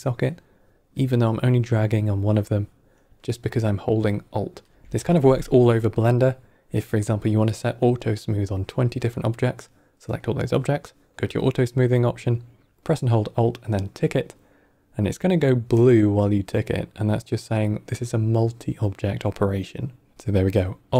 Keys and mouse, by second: 1.5-4.5 alt+drag.